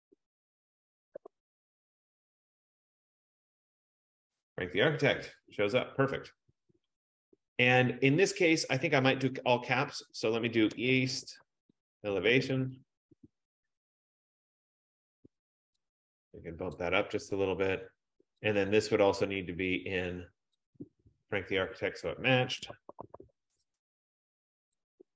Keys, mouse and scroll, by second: 0.1 click, 1.0-3.9 typing, 6.1 click, 6.9-7.6 typing, 7.1-11.0 drag, 10.4-13.4 typing, 14.9 click, 16.8 click, 18.6 click, 18.8 click, 20.7 click, 21.9 click, 22.5-23.8 typing, 24.5 F15, 24.9 click.